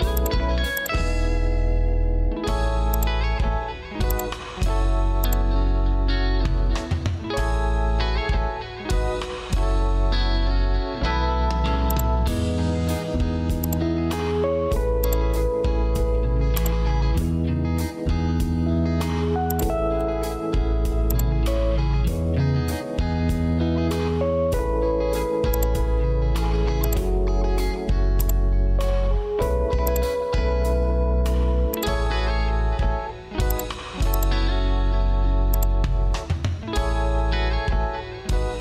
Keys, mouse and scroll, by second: 6.4 ctrl+f, 27.6 ctrl+q, 34.5 ctrl+q.